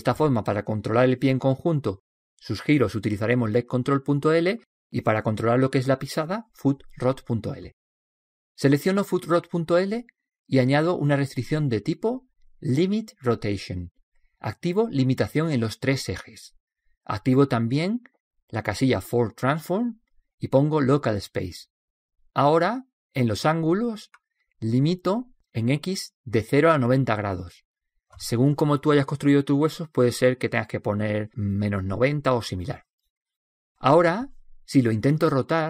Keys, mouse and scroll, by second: 10.9-12.9 drag, 16.6-23.2 drag, 24.2-26.1 drag, 34.7-35.6 right drag.